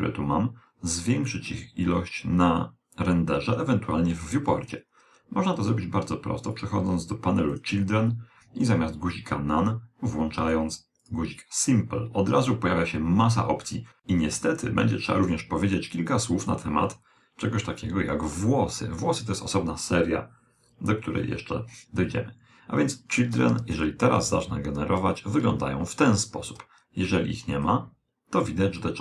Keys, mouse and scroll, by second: 3.5 a, 5.6-9.1 drag, 5.6 a, 10.9 click, 23.5 alt+a, 27.5 alt+a, 27.5 click.